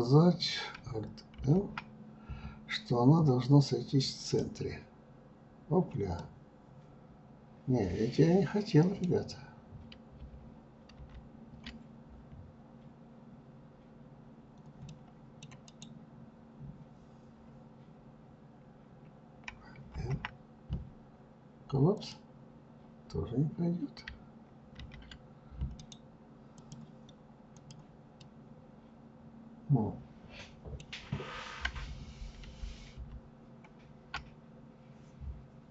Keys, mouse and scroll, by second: 5.0-8.0 middle drag, 13.7-14.5 middle drag, 14.5-26.4 right drag, 26.4 click, 27.0-31.3 middle drag, 31.3 ctrl+z.